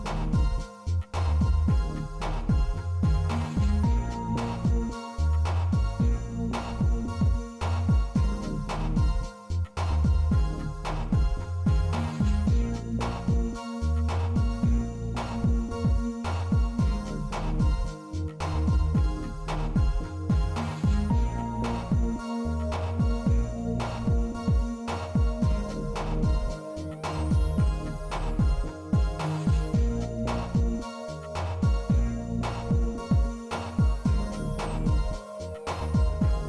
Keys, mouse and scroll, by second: 0.2 middle click, 2.2 click, 3.6 click, 9.1 middle click, 9.9 ctrl+r, 12.7 middle click, 13.9 shift+middle click, 15.0 middle click, 16.0 ctrl+r, 19.6 middle click, 20.6 3, 21.7 click, 27.3 Tab, 27.3 i, 27.7-30.9 middle drag, 31.5-34.6 middle drag, 34.8 Tab, 35.7 shift+middle click.